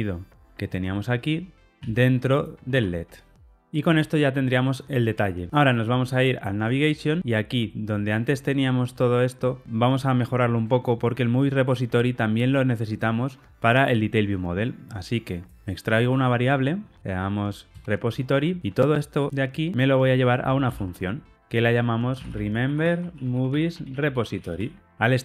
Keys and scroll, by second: 1.8 super+x, 2.6 super+v, 16.0 alt+super+v, 20.7 alt+super+m.